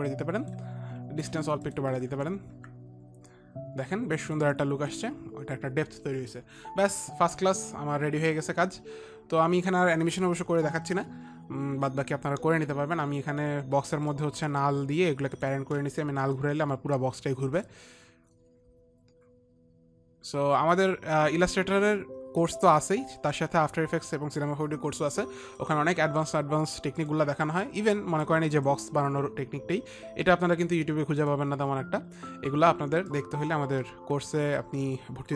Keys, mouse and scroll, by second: 0.4 click, 2.5 Up, 2.5 ctrl+z, 2.5 click, 3.1 Up, 14.5 click, 15.9 click, 16.8 click, 16.8 r, 18.1 click, 20.1 r, 21.0 click, 27.5 click, 29.1 click, 31.7 click, 31.8 click, 33.7 click, 34.9 click.